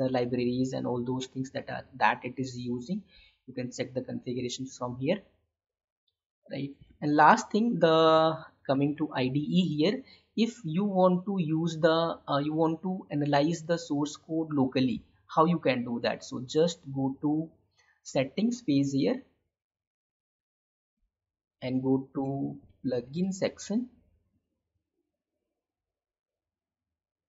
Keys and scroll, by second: 6.9 Tab, 8.2 alt+Tab.